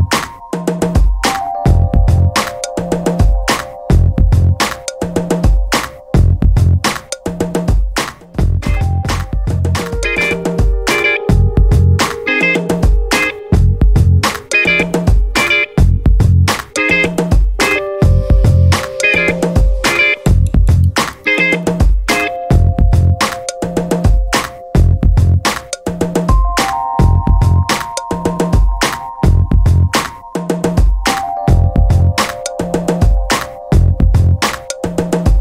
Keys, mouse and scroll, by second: 4.2 2, 10.7 3, 17.3 4, 20.2-20.6 scroll down 2, 21.6 5, 22.4-22.8 scroll down 2, 23.4-24.3 scroll up 4, 26.5 0, 27.4 scroll down 2, 27.9-29.1 scroll up 4, 31.6 click, 33.3 click.